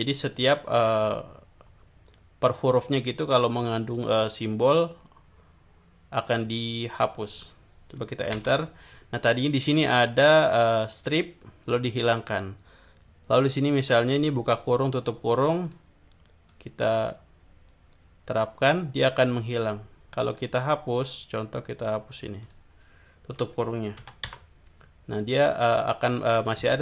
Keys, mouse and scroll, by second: 8.4 Return, 13.4 click, 15.6 click, 16.5 click, 20.3 click, 22.4 click, 24.0 BackSpace, 24.2 Return.